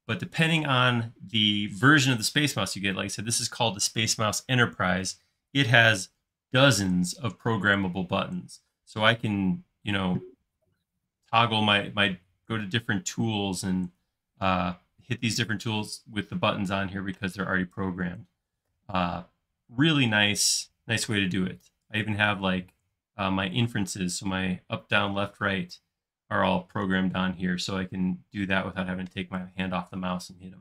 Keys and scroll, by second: 19.9 space, 22.1 l, 22.8 Left, 24.0 Right, 25.1 Up, 26.9 Down, 28.5 space.